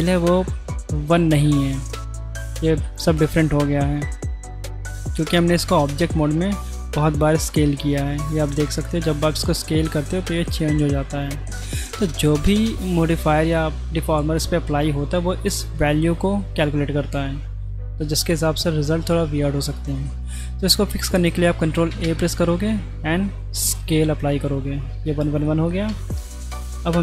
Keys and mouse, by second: 4.2-4.9 middle drag, 6.8 s, 18.2 middle click, 19.1-19.9 middle drag, 21.1 middle click, 21.9 ctrl+a, 25.4 middle drag, 25.9 Tab.